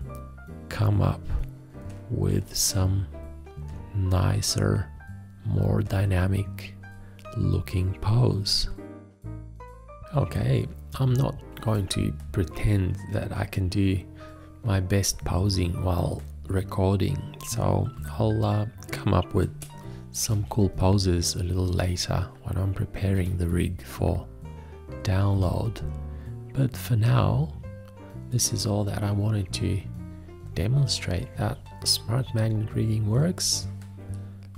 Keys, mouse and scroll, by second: 20.1-21.0 typing, 32.6 shift+..